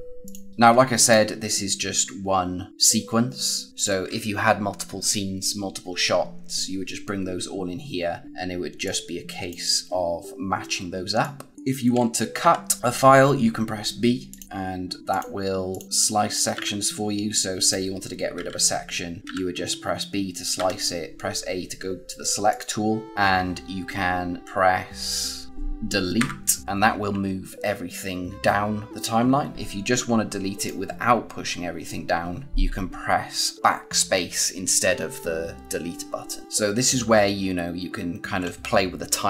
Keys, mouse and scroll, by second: 0.1 click, 3.7 click, 8.7 click, 12.3 b, 14.2 click, 15.8 z, 16.5 b, 17.5 click, 18.3-20.5 typing, 22.4 click, 29.5 z, 30.5 click.